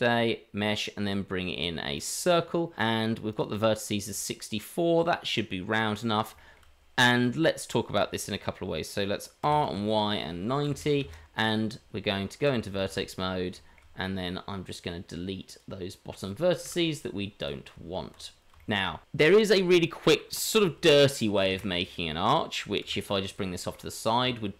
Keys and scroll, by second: 9.4 r, 11.9 Tab, 12.8 shift+z, 16.6 Delete, 17.7 Tab, 21.4 shift+d, 24.2 Tab.